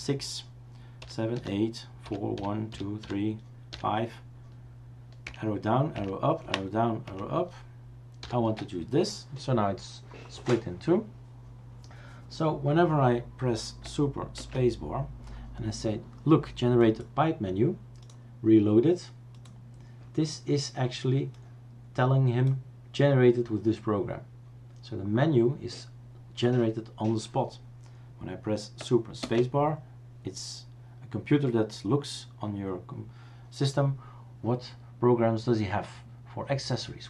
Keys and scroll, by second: 1.0 super+7, 1.4 super+8, 2.0 super+4, 2.3 super+1, 2.7 super+2, 3.0 super+3, 3.7 super+5, 5.2 super+Down, 5.9 super+Up, 6.4 super+Down, 7.0 super+Up, 8.2 super+6, 14.4 super+space, 29.2 super+space.